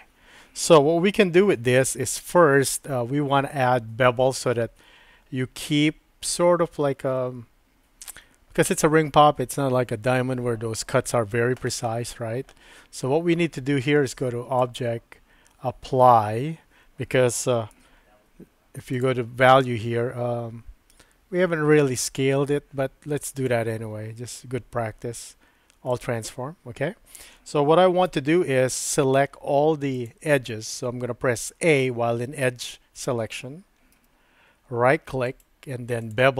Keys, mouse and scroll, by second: 1.4 Tab, 2.1-3.6 middle drag, 14.6-16.7 drag, 17.7 n, 19.0 click, 23.5-26.0 drag, 28.1 Tab, 28.1 typing, 29.9 click, 34.0 a, 35.4-36.3 right drag.